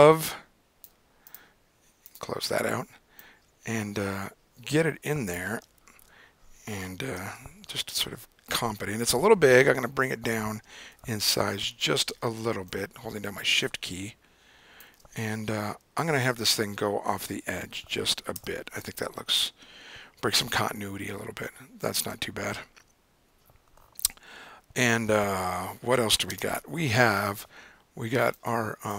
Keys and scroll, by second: 6.2 super+=, 7.2 super+-, 9.1 super+t, 11.0 super+0, 15.8 Left, 15.9 Left, 16.6 Left, 17.4 Up, 18.4 Return, 26.5 super+o.